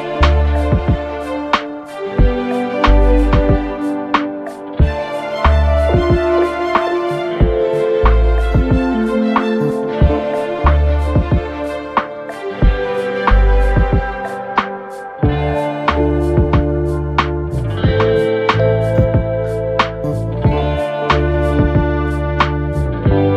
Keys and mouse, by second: 0.0-1.3 drag, 1.4 F1, 1.6 alt+x, 2.0 alt+middle click, 4.2 alt+click, 4.3 alt+middle click, 5.3 click, 5.8 click, 6.4 alt+click, 6.8 click, 7.9 alt+click, 8.7 alt+click, 9.1 alt+x, 9.6 click, 9.9 click, 10.3 3, 10.5 click, 11.3 right click, 11.7 alt+click, 12.1 4, 12.4 click, 12.9 middle click, 13.0 alt+click, 13.5 alt+middle drag, 13.7-14.8 alt+drag, 15.4 click, 16.6 alt+click, 17.2-17.8 drag, 18.2-18.5 drag, 18.9 click, 19.9 click, 20.3 alt+click, 20.5 alt+middle click, 21.2 alt+drag, 21.6 alt+click, 21.9 alt+click, 22.1 click, 22.3 alt+click, 22.8 alt+click, 23.2 1.